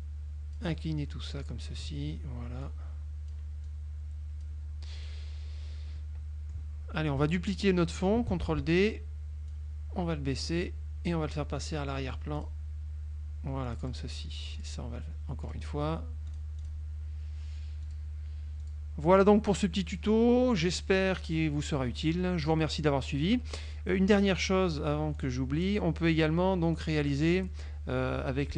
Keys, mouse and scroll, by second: 1.2 click, 2.7 click, 3.7 click, 5.1 click, 6.1 middle click, 8.6 ctrl+d, 9.6-11.4 drag, 12.5 click, 13.8 click, 14.7 click, 15.5 click, 16.4 click, 16.9 click, 17.9 click, 18.7 click, 19.3 middle click, 20.9 click, 21.3 click, 22.1 middle click, 25.3 click, 26.9 click.